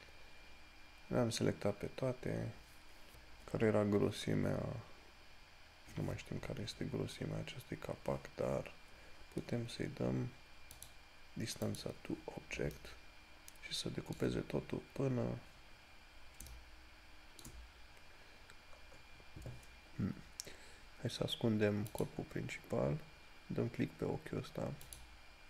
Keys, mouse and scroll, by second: 7.5 scroll down 1, 11.1 click, 22.2 click, 25.1 click.